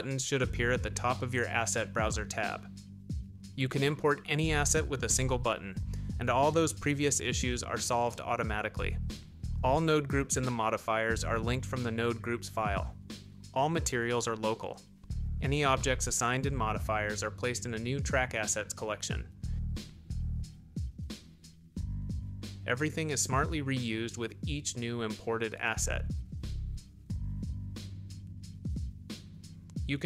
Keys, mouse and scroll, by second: 4.2 click, 6.9 click, 8.4 click, 8.9 click, 9.3 click, 9.8 click, 10.3 click, 12.4 click, 13.6 click, 13.9 g, 14.2 shift+z, 15.6 click, 16.7-17.3 drag, 19.6 click, 20.8 click, 21.8 g, 22.1 shift+z, 23.3 click, 29.6 ctrl+alt+KP_1.